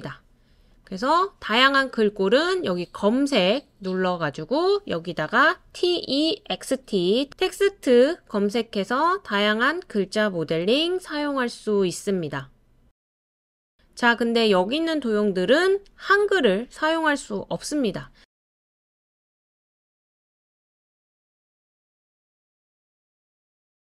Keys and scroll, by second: 5.7-7.8 typing.